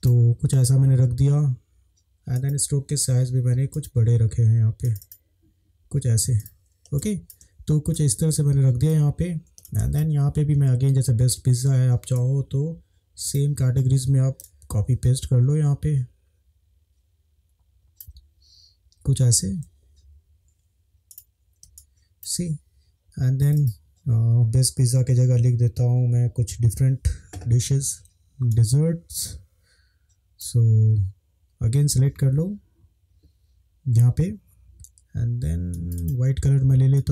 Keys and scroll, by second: 7.0 space, 19.7 Left, 20.1 Left, 21.7 space, 28.0 ctrl+v.